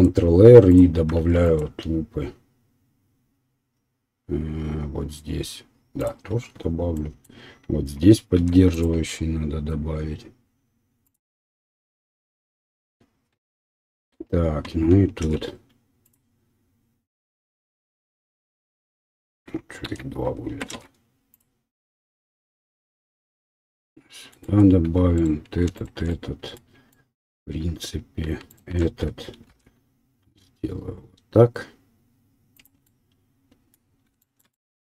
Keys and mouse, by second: 1.2 ctrl+r, 8.3 ctrl+r, 15.2 ctrl+r, 19.8 ctrl+z, 20.7 ctrl+r, 20.7-23.0 ctrl+drag, 23.0-25.1 middle drag, 25.1 alt+click, 25.2 alt+middle click, 25.7 alt+shift+click, 25.8-28.5 alt+shift+middle drag, 28.5 alt+shift+click, 28.6-35.0 alt+shift+middle drag, 29.4 ctrl+b.